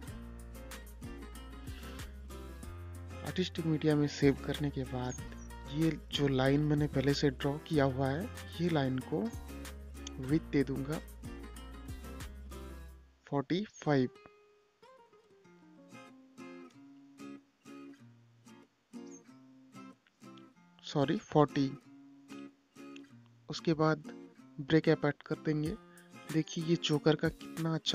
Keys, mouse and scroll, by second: 1.6 scroll down 1, 2.8 space, 3.8 click, 4.3 scroll up 1, 5.8 i, 7.0 click, 18.2 click, 18.6 space, 19.1 click, 19.8 scroll up 1, 21.0 click, 21.6 right click, 23.9 click, 27.7-27.9 scroll down 1.